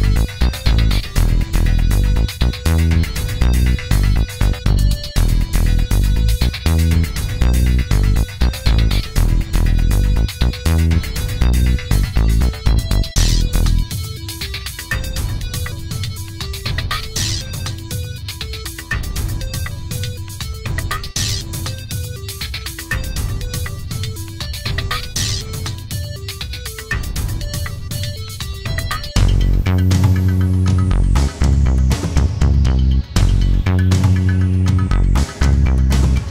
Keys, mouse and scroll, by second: 0.5-1.0 scroll down 2, 2.3 click, 5.2 click, 5.8 click, 8.5 click, 15.2 click, 18.8 click, 21.3 ctrl+d, 24.0 click, 25.5 click, 26.7-29.3 drag, 30.3 click, 31.3 ctrl+d, 32.4 shift+click, 34.0 click, 36.0 click.